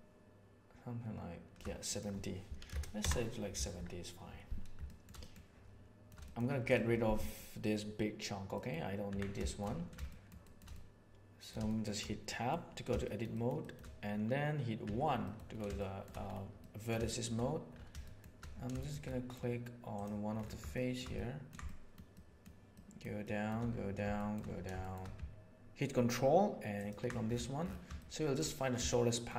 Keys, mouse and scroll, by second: 2.0-3.7 middle drag, 4.9 shift+middle click, 5.2 middle click, 5.7-6.3 shift+middle drag, 7.2 middle click, 8.5 middle click, 9.1 Tab, 9.3 shift+middle click, 10.1 middle click, 10.4-11.5 middle drag, 11.6 middle click, 12.2 middle click, 13.0 shift+middle click, 13.3 shift+middle click, 13.6 shift+middle click, 14.8 1, 15.7 shift+middle click, 16.6 middle click, 17.0 shift+middle click, 18.0 shift+middle click, 18.7 shift+middle click, 19.0 middle click, 20.7 shift+middle click, 21.1 ctrl+middle click, 21.6 shift+middle click, 22.1 shift+middle click, 22.7 shift+middle click, 23.2 shift+middle click, 24.1 shift+middle click, 24.8 shift+middle click, 26.7 ctrl+middle click, 28.0 shift+middle click, 28.9 shift+middle click.